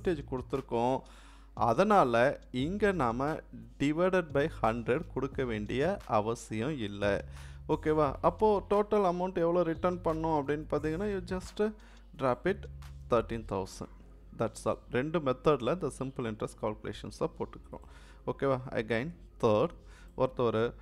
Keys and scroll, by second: 19.0 3.